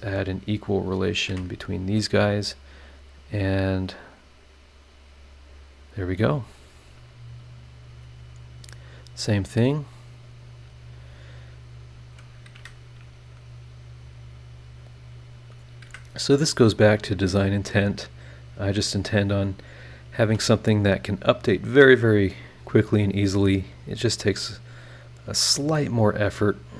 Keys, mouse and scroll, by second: 1.1 click, 1.3 e, 1.9 scroll up 1, 3.0 click, 3.8 click, 5.0 click, 5.5 click, 5.8-6.7 scroll down 3, 7.0 scroll up 2, 8.9 click, 10.9 click, 12.1 click, 12.5 Escape, 14.0 click, 14.7 click, 15.4 click, 15.8 Escape, 16.3 click, 17.0 click, 17.3 scroll down 1, 17.8 scroll up 1, 18.9 scroll up 1, 19.4 click, 19.7 scroll down 2, 20.2 e, 20.8-21.3 scroll up 4, 22.5-23.8 drag, 24.3 click, 25.1 click, 26.0 click, 26.6-26.7 scroll down 2.